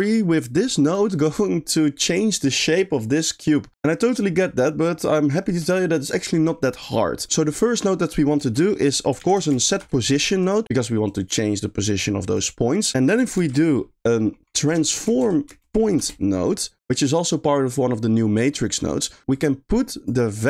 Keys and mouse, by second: 1.1 click, 7.4 middle click, 8.4 shift+a, 12.4 click, 13.4 shift+a, 18.8 middle click, 19.3 click, 20.0 click.